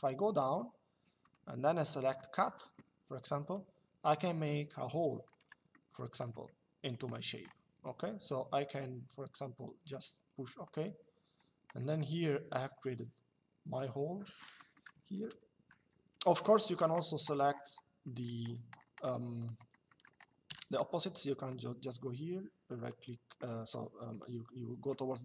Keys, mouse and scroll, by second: 0.9 click, 3.2 click, 5.4 middle click, 8.0 click, 10.4 click, 12.0 shift+middle click, 14.2 middle click, 16.1 shift+middle click, 17.7 middle click, 19.1 click, 19.6 middle click, 20.2 e.